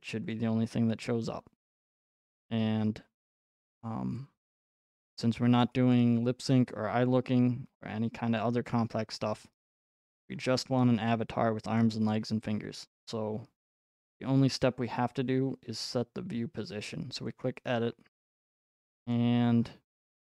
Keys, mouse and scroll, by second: 0.3 click, 0.3 typing, 3.8 middle click, 4.6 right click, 6.0 middle click, 7.9 scroll, 8.7-11.1 scroll, 11.1-11.8 scroll, 11.8-12.2 scroll, 12.4-13.8 scroll, 14.9 scroll, 17.3 click, 19.1-20.2 scroll.